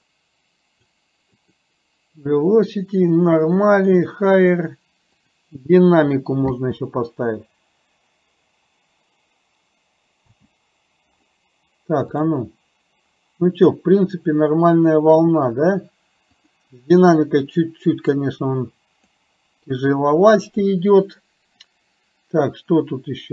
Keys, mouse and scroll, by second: 1.5-3.8 drag, 5.2 click, 6.5 space, 10.3 space, 12.1 click, 18.2 click, 19.8 click, 21.7-23.3 drag.